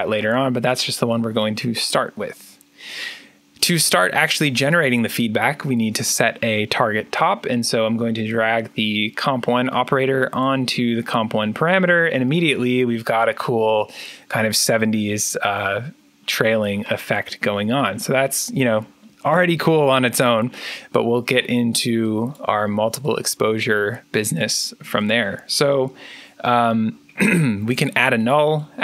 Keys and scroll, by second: 27.5 alt+n.